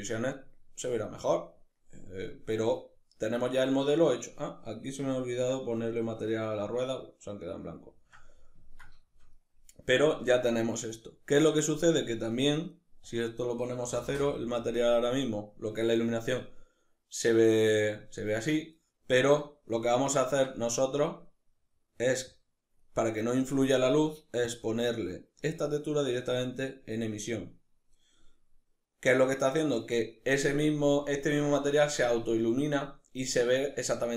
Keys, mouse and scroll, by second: 11.0 click, 12.4-19.1 drag, 13.5 Return, 19.1-21.7 middle drag, 21.7 click, 23.8 click.